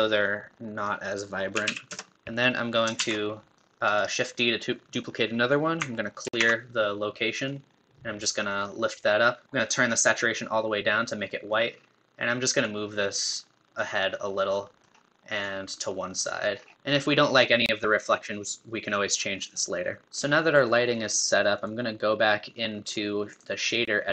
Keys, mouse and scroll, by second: 11.0-24.1 middle drag.